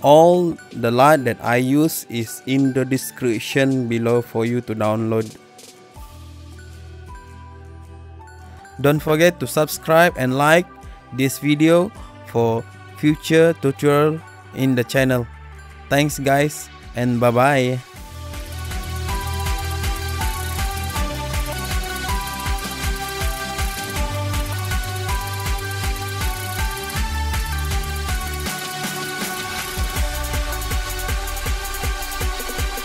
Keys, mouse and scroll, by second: 13.2 click, 14.4 click.